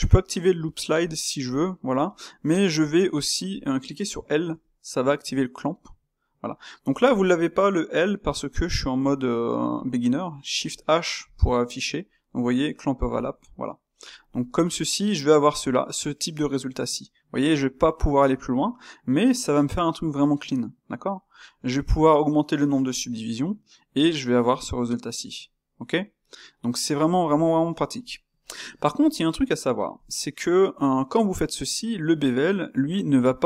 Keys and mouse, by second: 18.6-26.4 middle drag, 27.3-33.4 middle drag.